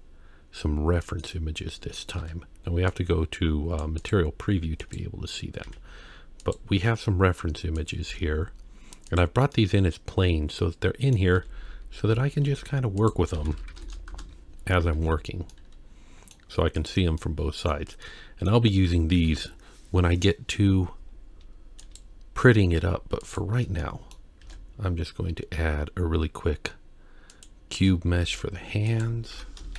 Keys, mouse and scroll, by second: 1.2 click, 1.7 scroll down 2, 2.2 z, 4.0 click, 4.8 click, 5.6 g, 6.8-7.8 scroll down 1, 7.8 click, 8.1 g, 9.5-11.2 middle drag, 11.4 g, 13.3 r, 15.2 ctrl+z, 15.5-16.3 middle drag, 16.8 click, 17.2 middle click, 18.1-18.5 middle drag, 19.3 KP_1, 21.8 click, 22.6-23.2 scroll up 2, 23.2 click, 23.8-24.1 shift+middle drag, 24.4 shift+a, 28.2 g, 29.3 F2.